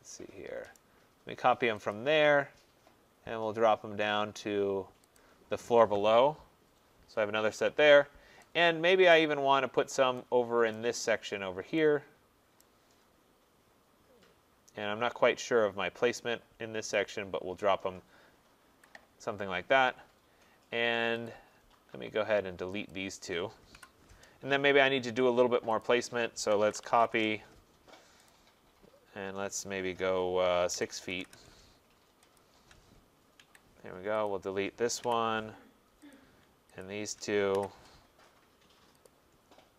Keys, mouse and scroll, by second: 0.8 right click, 1.9 click, 2.2 middle click, 3.1 middle click, 3.2 middle click, 5.2 click, 7.3-8.3 scroll, 9.1 right click, 9.4-9.8 scroll, 10.8 right click, 11.2 middle click, 11.3 middle click, 12.6 right click, 12.9 middle click, 13.0 middle click, 13.6 middle click, 13.7 middle click, 14.8 middle click, 15.0 middle click, 17.1 click, 18.7 Escape, 19.7 middle click, 20.1 middle click, 21.3 click, 22.9 shift+click, 23.8 Delete, 25.9 click, 26.5 typing, 28.3 click, 28.3 typing, 30.5-31.2 typing, 32.4 shift+click, 33.4 Escape, 34.3 click, 35.1 Delete, 36.1 click, 36.8 shift+click, 37.6 Delete, 39.1 click.